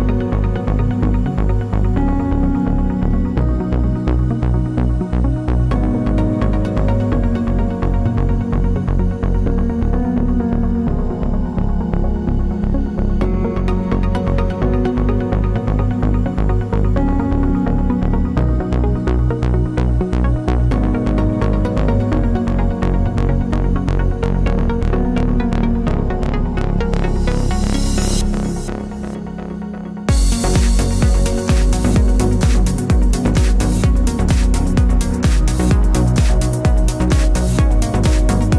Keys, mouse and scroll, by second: 1.1 click, 2.5 click, 3.0 click, 5.3-7.7 scroll up 2, 7.7 click, 9.3 click, 10.2 click, 11.9 click, 12.9-14.7 middle drag, 14.7 scroll up 3, 15.3-18.0 drag, 21.5 click, 24.7 click, 25.1-26.2 middle drag, 26.2 click, 27.0-28.4 middle drag, 28.4 scroll up 2, 28.7-29.4 middle drag, 29.4-30.2 scroll down 2, 32.9-33.5 scroll down 1, 33.5-35.4 middle drag, 35.4 click, 36.4-38.5 middle drag.